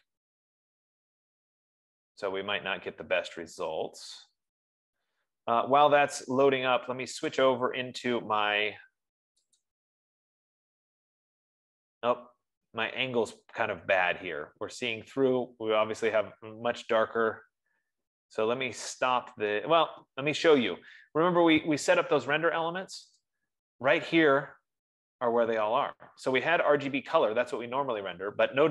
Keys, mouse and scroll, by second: 7.9-10.5 drag, 15.4 F15, 23.6-28.7 drag.